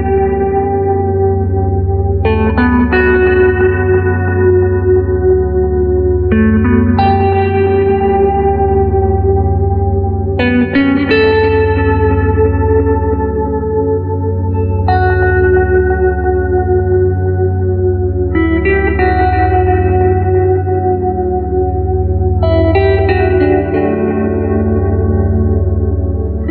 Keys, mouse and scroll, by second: 1.9 click, 10.1 click, 16.2 click, 21.6-24.7 middle drag, 24.7-25.7 scroll down 1, 25.7-26.5 scroll up 1.